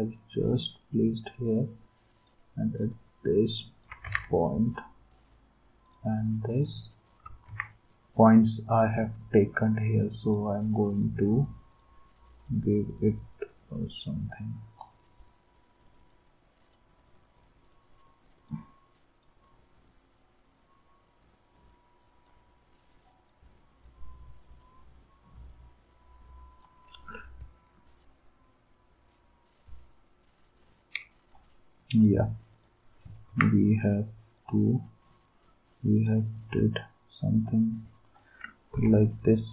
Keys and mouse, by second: 4.0 ctrl+z, 7.5 ctrl+s, 33.3 ctrl+s, 38.7 m.